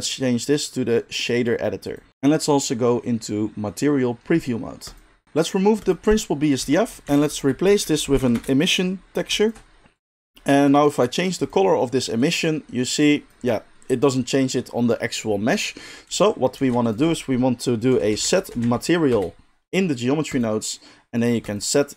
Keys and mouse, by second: 1.9-5.1 middle drag, 5.1 click, 5.1 middle click, 5.7 click, 5.9-7.2 middle drag, 6.6 x, 7.0 shift+a, 9.4 ctrl+shift+click, 9.9-11.4 drag, 12.6-21.4 middle drag, 16.5 shift+a, 21.4-21.9 drag.